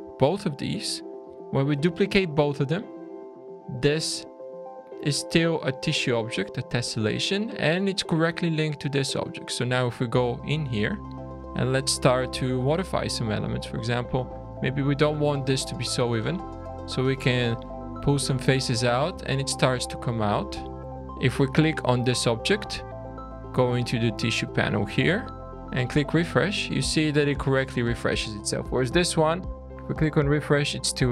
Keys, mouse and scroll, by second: 0.2 shift+click, 1.0 scroll up 1, 1.6 shift+d, 3.2-3.6 scroll up 3, 3.7 click, 5.2 click, 5.6 middle click, 7.6 middle click, 9.0 click, 9.3 scroll down 2, 9.6 Tab, 10.0 middle click, 10.4 alt+a, 10.8 2, 11.2 click, 12.0 scroll up 2, 12.5 alt+a, 13.1 click, 14.0 click, 16.0 click, 17.0 click, 19.2 shift+middle click, 20.1 shift+middle click, 20.8 Tab, 20.9 shift+middle click, 20.9 scroll down 2, 21.3 click, 24.3 click, 25.8 click, 26.5-26.9 scroll up 5, 27.1-27.5 scroll down 3, 27.6 middle click, 28.4 click, 29.8 click, 30.5 middle click.